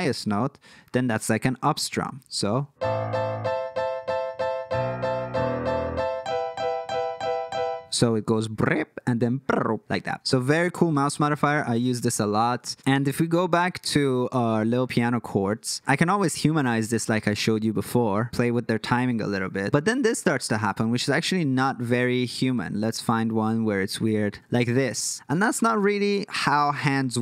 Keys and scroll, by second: 11.2 super+f, 13.0 alt+super+,, 13.3 alt+super+,, 13.8 alt+super+,.